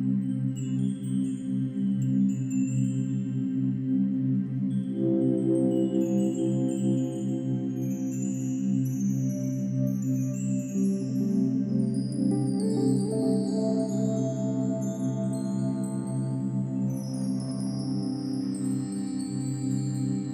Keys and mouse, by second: 0.7-5.0 drag, 5.3-5.6 typing, 6.6-7.2 drag, 7.7-8.2 ctrl+alt+drag, 8.5 ctrl+alt+click, 8.9-11.0 ctrl+alt+drag, 8.9 typing, 11.3-12.5 drag, 12.6 ctrl+s, 13.0 alt+a, 13.5-14.5 ctrl+alt+drag, 14.9 click, 16.0-16.6 drag, 17.3-18.1 drag, 20.2-20.3 drag.